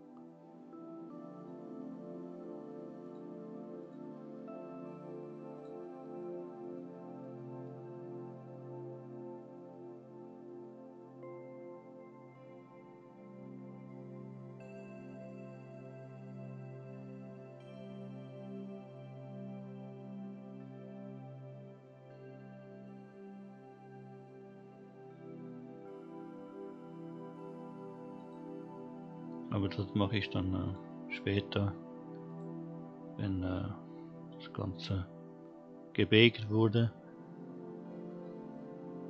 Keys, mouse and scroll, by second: 0.3-0.9 scroll up 3, 3.0 click, 3.8 click, 5.5 click, 7.2-7.7 middle drag, 15.2 scroll down 2, 15.9 scroll up 1, 18.4 scroll down 1, 28.2 click, 30.6-32.3 drag, 33.9-34.2 scroll down 1, 34.8-36.9 scroll up 1.